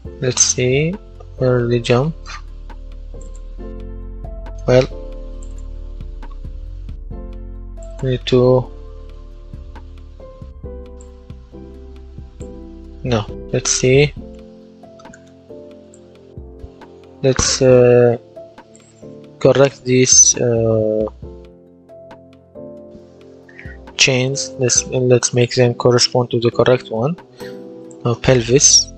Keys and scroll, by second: 28.4-28.9 typing.